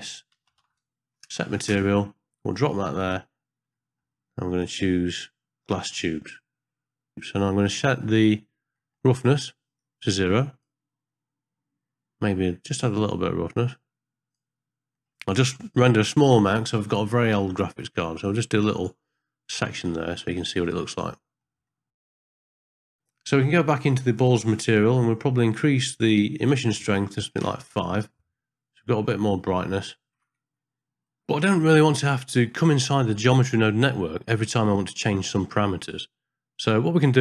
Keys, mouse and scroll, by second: 3.8 middle click, 4.0-4.4 scroll up 1, 4.6-6.1 drag, 7.7 middle click, 8.1 scroll up 1, 8.8 middle click, 9.8 click, 13.0-14.4 drag, 16.3 ctrl+b, 20.2 middle click, 21.2 ctrl+middle click, 21.4 ctrl+scroll up 1, 21.7 shift+middle drag, 22.1 middle click, 22.3 ctrl+middle click, 24.2 click, 25.0 middle click, 26.4-27.5 drag, 31.8 ctrl+alt+b, 32.6-33.9 ctrl+middle drag, 34.5 middle click, 35.0 ctrl+middle click.